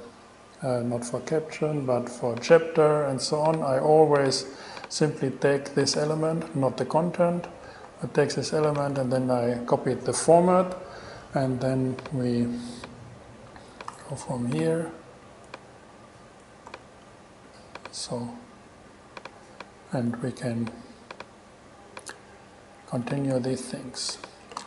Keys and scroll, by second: 8.1 super+c, 9.0 super+v, 14.1 super+c, 16.9 super+v.